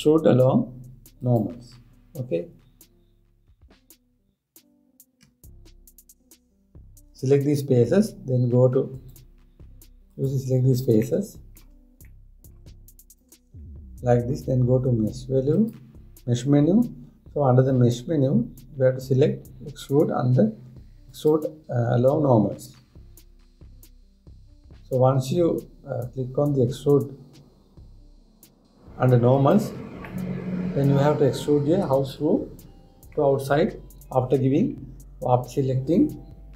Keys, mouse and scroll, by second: 9.6 click, 10.7 click, 11.6-13.6 middle drag, 13.6 shift+click, 14.3-16.1 middle drag, 16.1-19.3 drag, 30.7-33.7 middle drag.